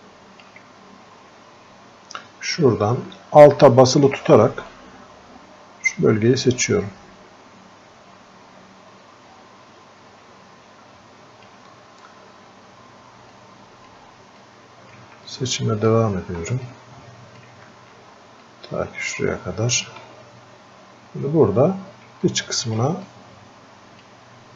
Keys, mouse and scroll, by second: 0.0-1.4 alt+drag, 1.4 scroll up 2, 1.6-2.5 scroll down 2, 2.5-3.4 scroll down 1, 4.7-13.4 alt+drag, 13.4 alt+click, 14.4 click, 15.3-16.7 alt+drag, 16.7-18.5 drag, 18.5-20.8 alt+drag, 20.8 scroll up 1, 22.3 alt+click, 23.1-24.5 drag.